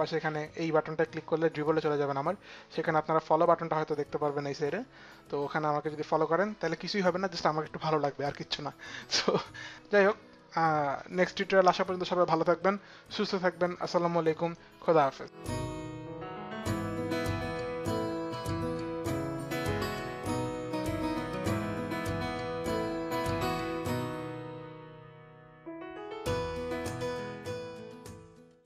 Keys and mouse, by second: 1.5 click, 2.6 click.